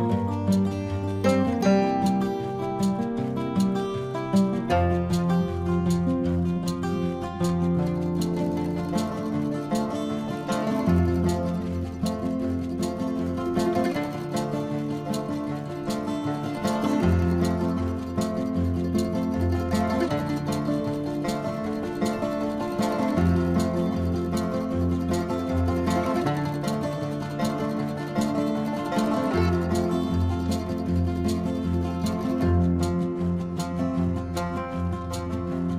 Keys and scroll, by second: 0.9-2.9 typing, 4.3 space, 5.0 space, 6.7 space, 7.6 space, 7.9 space, 8.7 space, 9.2 ctrl+alt+z, 10.0 space, 12.5 space, 12.9 space, 13.5 space, 14.3 space, 15.2 ctrl+-, 15.6 ctrl+-, 16.6 space, 17.7 space, 18.4 space, 19.4 space, 19.7 space, 21.1 space, 24.4 space, 24.7 space, 27.1 space, 27.3 ctrl+alt+z, 27.6 space, 28.9 space, 29.5 space, 32.3 space, 34.2 space.